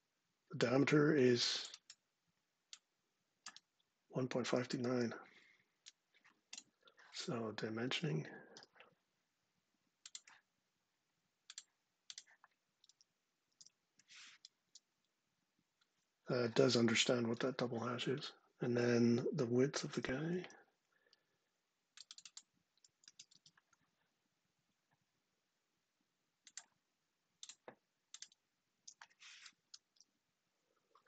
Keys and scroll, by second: 4.5 super+c, 8.2 d, 13.2 super+v, 14.3 Return, 19.6 super+Tab, 22.7 super+c, 23.0 super+Tab, 28.4 super+v, 29.3 Return.